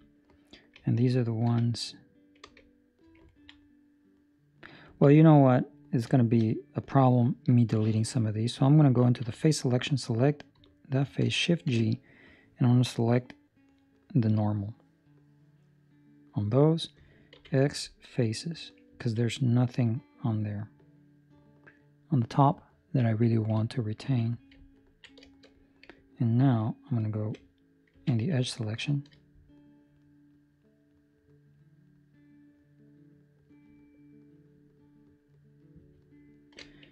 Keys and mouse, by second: 3.2 ctrl+middle click, 3.5 middle click, 5.0 ctrl+middle click, 5.1 middle click, 5.2 ctrl+middle click, 6.1 shift+middle click, 6.3 shift+middle click, 6.5 middle click, 7.5 ctrl+middle click, 7.8 middle click, 9.1 3, 9.6 right click, 11.7 shift+g, 13.9 middle click, 18.8 x, 18.9 ctrl+middle click, 19.2 middle click, 19.8 middle click, 20.1 ctrl+middle click, 22.7 ctrl+middle click, 24.0 ctrl+s, 24.7 ctrl+middle click, 25.3 shift+middle click, 25.5 middle click, 26.7 alt+right click, 27.9 2, 28.6 alt+right click, 29.3-36.5 alt+shift+right click.